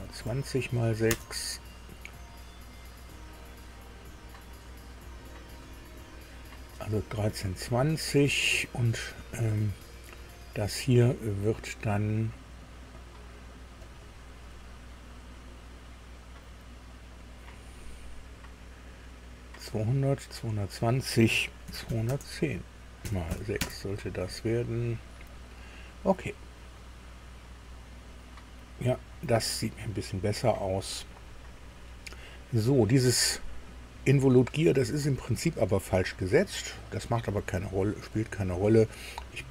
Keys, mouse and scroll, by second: 1.1 Return, 2.8 click, 13.8 click, 17.2 click, 21.6 KP_2, 21.8 KP_1, 22.0 KP_0, 23.3 KP_6, 23.6 KP_Enter, 25.1 click, 26.2 scroll down 1, 38.1 click.